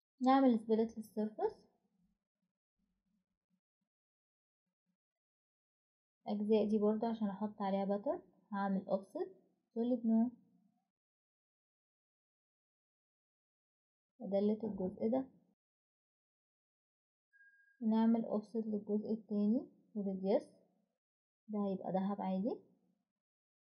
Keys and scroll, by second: 2.2 Escape, 8.6-9.1 typing, 11.1-13.1 typing, 15.7 Delete, 19.5 ctrl+z, 20.8-21.2 typing, 21.2 Return, 21.5 Return, 23.5 Escape.